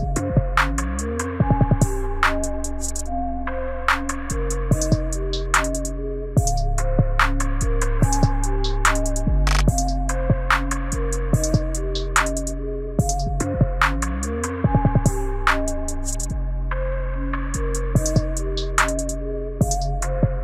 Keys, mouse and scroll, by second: 6.1 right click, 11.5 space, 16.5 space, 17.2 right click, 20.1 space.